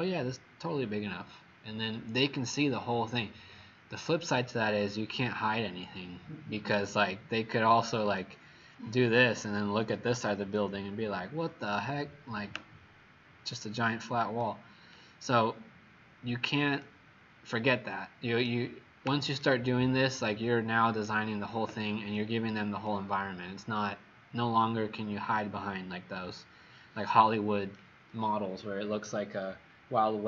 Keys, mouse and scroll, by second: 8.3 right click, 15.2-15.6 scroll down 6, 15.9 scroll down 2, 16.8 right click, 22.1 click.